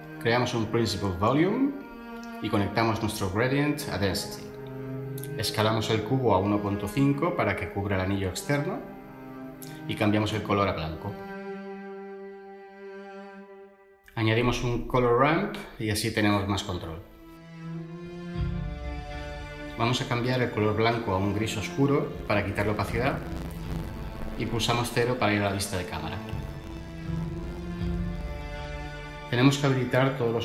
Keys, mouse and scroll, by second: 0.0-0.4 typing, 0.9 Page_Down, 1.0 Page_Down, 1.3 Return, 7.3-7.8 typing, 8.0 Return, 13.0 ctrl+shift+a, 14.1-14.7 typing, 15.2 Return, 24.8 0.